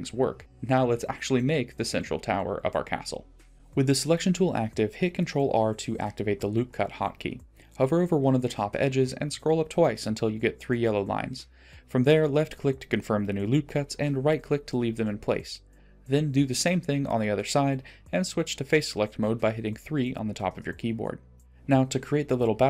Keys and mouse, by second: 7.1 ctrl+r, 11.8-12.7 middle drag, 13.2 middle click, 14.9 ctrl+r, 18.0 3, 20.0 shift+click, 20.4 middle click, 22.0 shift+click, 22.4 middle click.